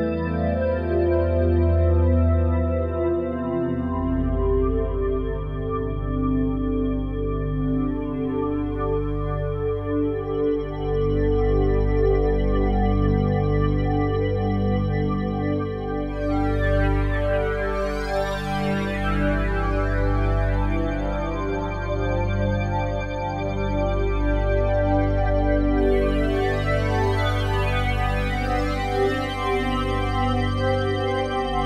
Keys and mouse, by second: 0.3-1.6 ctrl+alt+drag, 2.2 alt+shift+click, 2.6-3.3 typing, 2.8-4.0 ctrl+alt+drag, 4.9-6.3 alt+shift+drag, 5.2-5.9 typing, 6.5 ctrl+alt+click, 6.9 ctrl+alt+click, 7.4-9.5 alt+shift+drag, 10.1-10.8 typing, 12.4 click, 16.3 right click, 18.0 right click, 18.6-19.7 right drag, 19.7 click, 20.4 shift+click, 21.6-21.9 typing, 23.3 shift+click, 24.7 ctrl+s, 25.5 ctrl+alt+click, 26.7 click, 27.8 alt+shift+click, 28.3 ctrl+alt+click, 29.3-31.6 alt+shift+drag, 29.6 typing.